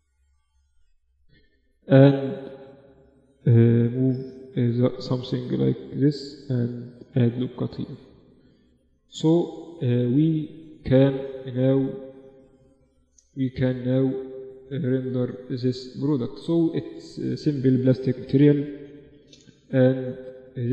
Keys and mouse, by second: 0.6-3.2 drag, 2.2-4.1 right drag, 3.2 g, 4.7 ctrl+r, 6.3 z, 6.7 Tab, 7.4 Tab, 8.0 Tab, 8.6 ctrl+s, 9.9-13.8 middle drag, 13.8 right click, 15.2-18.7 drag.